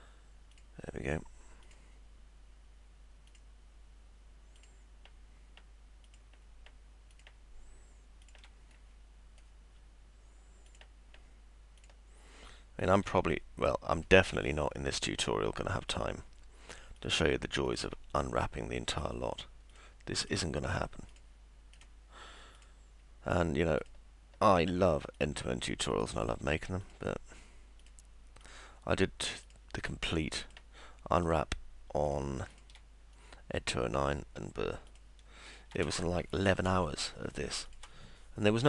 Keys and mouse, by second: 0.5 ctrl+click, 1.7 ctrl+click, 3.3 ctrl+click, 4.6 ctrl+click, 6.1 ctrl+click, 7.1 ctrl+click, 8.2 ctrl+click, 9.3 middle click, 10.7 ctrl+click, 11.8 ctrl+click, 12.8 ctrl+click, 13.7 middle click, 15.9 ctrl+click, 17.0 ctrl+click, 17.7 ctrl+click, 18.4 middle click, 19.7 ctrl+click, 21.1 ctrl+click, 21.8 ctrl+click, 22.6 ctrl+click, 23.8 ctrl+click, 25.1 click, 25.9 click, 26.8 click, 27.8 click, 28.4 click, 29.5 click, 30.4 click, 31.2 click, 32.1 ctrl+click, 33.1 middle click, 34.9 ctrl+click, 35.5 ctrl+click.